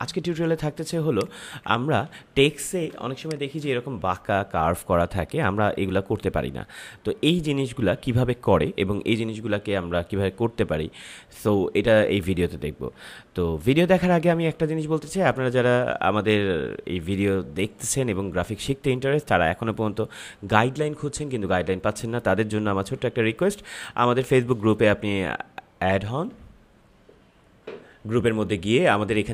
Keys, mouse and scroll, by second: 0.2 ctrl+=, 1.0 click, 1.7 ctrl+=, 2.9 space, 3.1 click, 3.4 space, 27.6 ctrl+m, 28.2 scroll up 1.